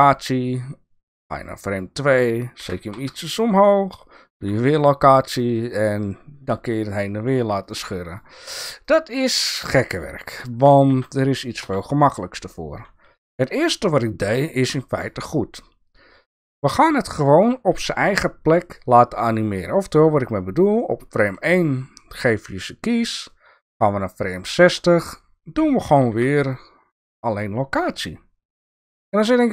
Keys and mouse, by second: 1.2 click, 2.6 g, 4.4 i, 7.7 drag, 8.1 click, 8.8 click, 9.9 click, 11.0 ctrl+z, 11.6 ctrl+z, 14.2 click, 23.3-24.8 drag, 26.1 i.